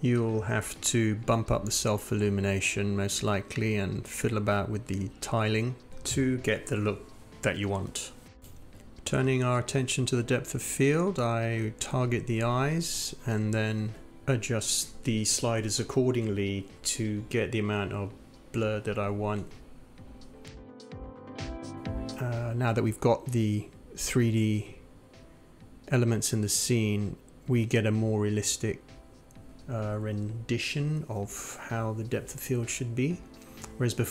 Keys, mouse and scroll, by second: 8.1-9.8 drag, 10.1 click, 11.7 click.